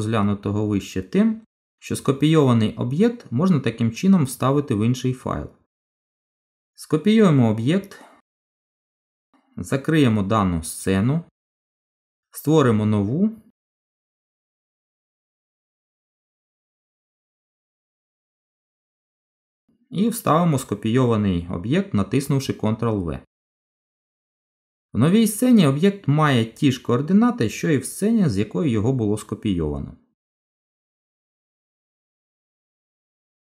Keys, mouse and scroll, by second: 1.9-2.3 scroll down 2, 2.3 middle click, 7.9 ctrl+c, 10.9 click, 18.2 click, 18.7 n, 22.7 ctrl+v, 23.8 middle click, 27.9 middle click, 31.8 shift+click, 32.8 shift+click.